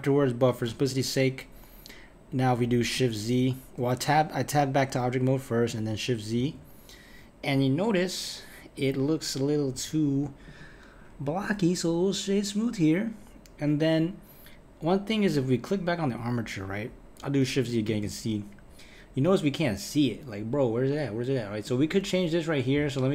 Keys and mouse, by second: 0.7 Tab, 6.4 shift+z, 9.7 KP_1, 10.4-13.6 right drag, 16.0 click, 17.9 shift+z, 21.6-23.1 drag.